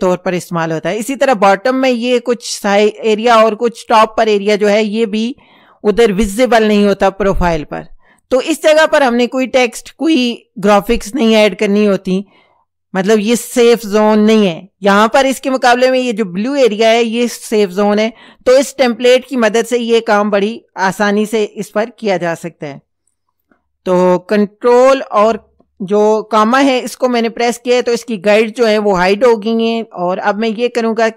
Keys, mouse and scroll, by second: 25.3 ctrl+,.